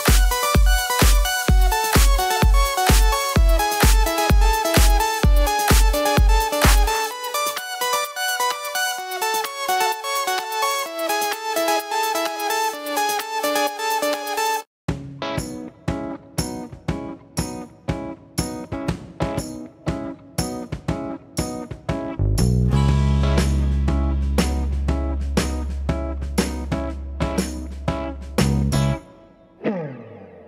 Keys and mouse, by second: 0.0-6.0 typing, 5.3-8.6 shift+right drag, 6.3 alt+z, 6.5 middle click, 7.9 f, 8.5 click, 8.6-10.1 middle drag, 8.9-11.1 right drag, 9.4 1, 10.3 f, 10.5 click, 11.1 click, 11.2 right click, 11.5 ctrl+f, 11.5 click, 11.6 right click, 11.7 click, 12.0-15.7 ctrl+right drag, 12.4 ctrl+f, 13.5 ctrl+f, 14.4 ctrl+f, 14.8-16.5 typing, 15.4 shift+click, 15.7 shift+click, 15.8 shift+right click, 16.3 click, 16.3 right click, 17.2 shift+click, 17.3 right click, 17.6 shift+click, 17.7 right click, 18.2-21.5 typing, 19.0 right click, 19.3 click, 19.3 middle click, 19.5 right click, 20.2 right click, 20.5-30.4 right drag, 20.7 click, 21.0 click, 22.2 click, 22.2 middle click, 22.5 f, 22.7 click, 22.7 middle click, 22.8 f, 23.0 click, 23.0 middle click, 24.7 f, 25.3 shift+click, 25.6 shift+click, 27.0 shift+click, 27.1 f, 27.9 ctrl+f, 29.1 shift+click, 29.4 click, 29.4 f, 29.9 f.